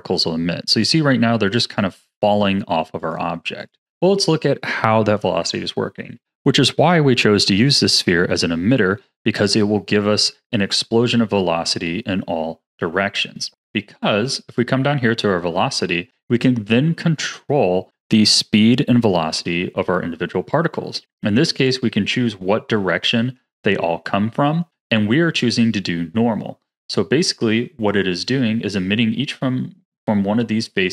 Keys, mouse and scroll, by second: 1.7-6.2 drag, 9.3-12.2 scroll down 9, 12.2-13.7 scroll up 8, 13.9-16.8 drag, 26.1-30.9 middle drag.